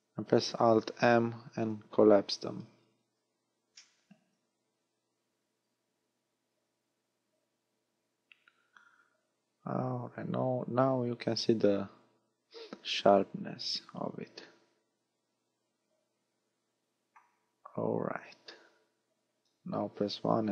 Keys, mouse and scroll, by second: 0.9 alt+m, 2.5-2.9 scroll down 6, 3.8 middle click, 19.8 KP_1, 20.4 z.